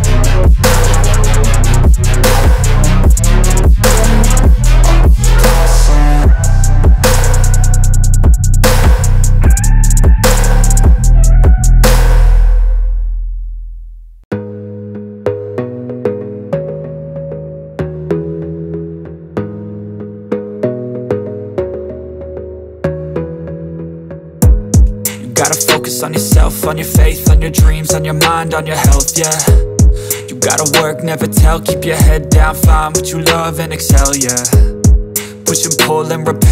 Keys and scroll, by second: 3.0 space, 9.0 F3, 9.4 space, 9.6 Escape, 10.6 ctrl+z, 13.9 ctrl+z, 14.8 ctrl+shift+z, 15.8 Escape, 17.1 F3, 19.0 shift+F2, 20.0 shift+Page_Up, 25.6 Escape.